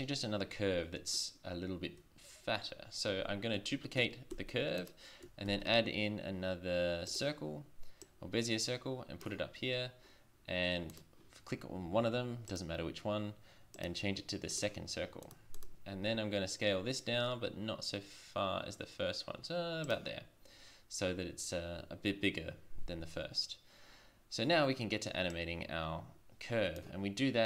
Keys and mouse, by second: 4.3 shift+d, 5.5 shift+a, 8.0-9.0 drag, 9.1 click, 9.6 drag, 10.9 click, 16.1 s, 25.3-26.8 drag.